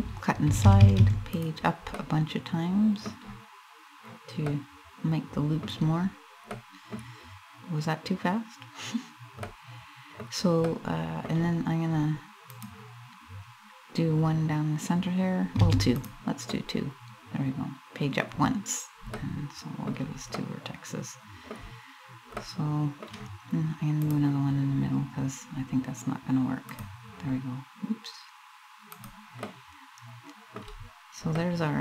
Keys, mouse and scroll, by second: 1.6 middle click, 2.3 middle click, 2.6 middle click, 4.1 middle click, 6.2 middle click, 9.1 middle click, 10.3 middle click, 12.2 click, 16.2 middle click, 18.3 scroll up 1, 18.8 middle click, 20.0 middle click, 22.0 middle click, 23.8 click, 29.0 middle click, 30.5 scroll up 1, 30.9 middle click.